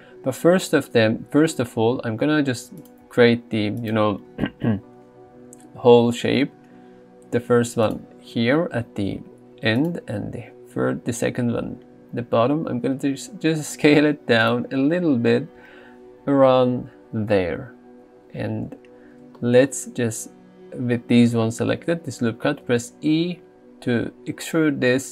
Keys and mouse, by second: 3.9 alt+click, 5.6 s, 7.9 click, 10.8 s, 14.5 click, 22.7 e.